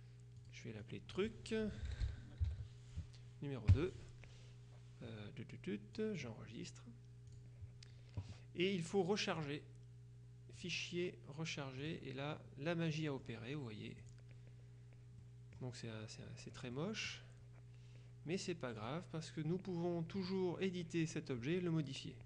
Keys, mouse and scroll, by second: 0.5 click, 1.7-3.8 typing, 6.1 click, 7.4 click, 9.5 click, 10.7 click, 11.9 click, 13.0 middle click, 14.1 click, 15.3 middle click, 16.9 middle click, 18.9 click.